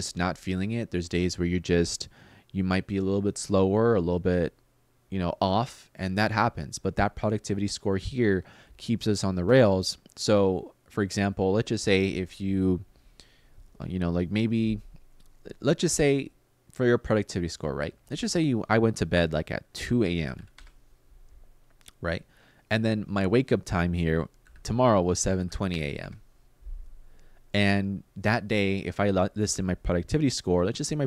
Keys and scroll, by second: 19.4-20.5 typing, 23.9-27.1 typing.